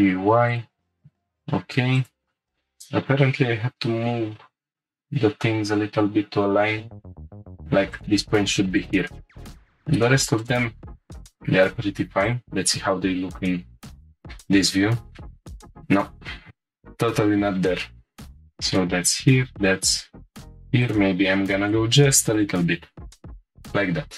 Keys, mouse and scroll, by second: 0.5 click, 1.0 g, 1.0 y, 2.0-2.5 drag, 2.5 x, 4.2 g, 7.9-9.5 drag, 9.5 g, 10.4-11.9 drag, 12.2 click, 12.4 middle click, 13.0-13.5 scroll down 1, 13.5-14.1 scroll up 1, 15.4 click, 18.2 click, 19.2 g, 19.7 y, 20.8 shift+click, 21.3 g, 21.4 x, 22.2 shift+click, 23.2 click, 23.2-23.7 scroll down 2, 24.1 scroll up 1.